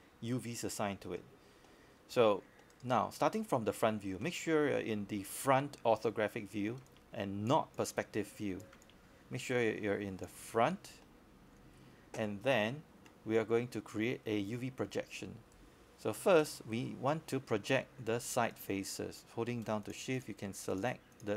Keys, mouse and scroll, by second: 0.0 click, 1.8 right click, 2.5-2.9 scroll up 1, 2.9-7.5 scroll down 1, 7.5 click, 10.6-11.9 scroll up 1, 11.9 click, 16.2-16.6 scroll up 1, 16.6-17.5 scroll down 1, 17.6 alt+middle click, 18.2 scroll up 1, 18.5 alt+middle click, 19.2 scroll up 1, 19.5 alt+middle click, 19.9 alt+scroll down 1.